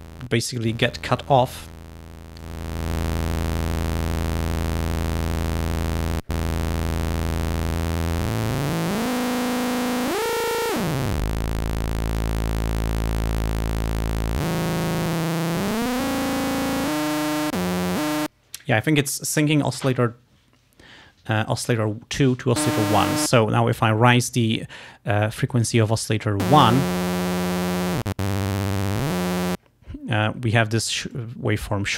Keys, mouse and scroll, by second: 0.6 click, 2.5-3.8 drag, 5.1 click, 6.0 click, 7.7-9.9 drag, 10.1-11.7 drag, 11.7 middle click, 12.7 middle click, 14.6 click, 15.1-16.6 drag, 16.9 click, 27.3 click, 28.0-29.7 drag, 31.2-31.9 drag.